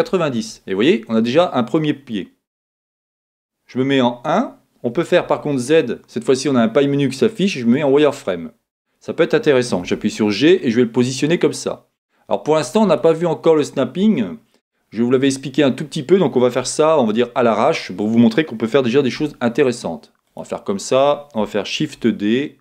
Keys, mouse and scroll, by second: 5.2 z, 9.8 g, 19.2 g, 20.4-22.6 middle drag, 21.8 shift+d.